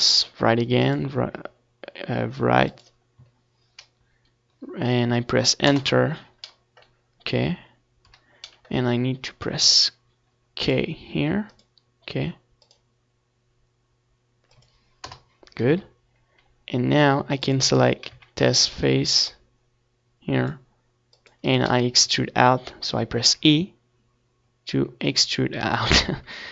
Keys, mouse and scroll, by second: 5.9 a, 7.7-9.8 drag, 8.5 c, 12.3-14.2 right drag, 12.5-14.2 drag, 14.2-16.6 middle drag, 14.2 e, 16.7-18.1 right drag, 17.3 KP_Decimal, 18.1-19.1 middle drag, 19.1-20.7 drag, 21.1-23.0 middle drag, 23.0 z, 23.3 a, 23.6 c, 24.6-25.9 right drag, 24.8 x, 25.5 z, 25.7 Tab, 25.9 middle click.